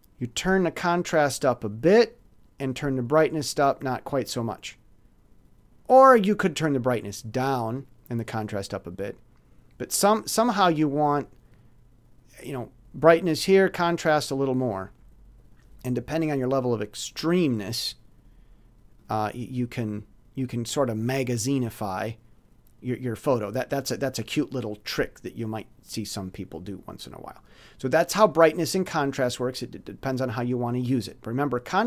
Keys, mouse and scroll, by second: 1.2 click, 3.2 click, 6.2 click, 8.0 click, 9.8 click, 10.4 click, 15.6 click, 16.2 click, 19.0 click, 21.0 middle click, 31.7-31.8 drag.